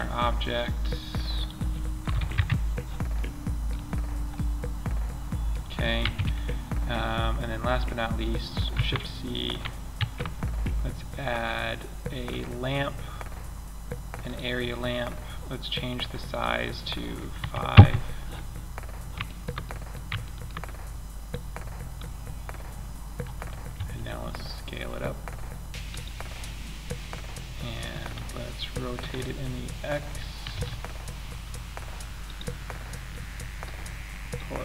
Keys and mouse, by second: 1.5 KP_0, 2.6-4.3 middle drag, 4.5 middle click, 5.4 ctrl+Up, 8.0 shift+c, 9.3 shift+a, 15.6-17.5 drag, 18.1 middle click, 19.1-20.6 drag, 23.1 s, 28.3 r, 32.5-33.0 middle drag.